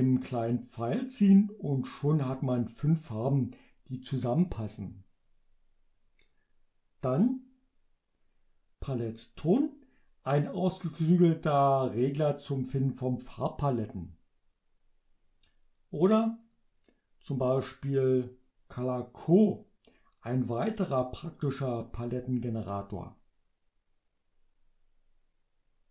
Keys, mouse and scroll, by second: 7.2 click, 16.5 click.